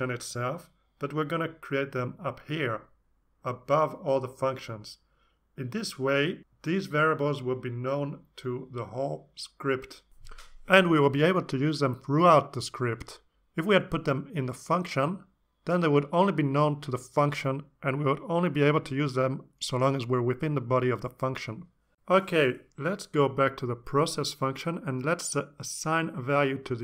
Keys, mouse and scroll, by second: 0.0-0.6 typing, 1.3 Return, 1.8-3.0 typing, 4.2 Down, 21.0 Down, 23.3 Up, 25.9 x, 26.2 space, 26.5 =.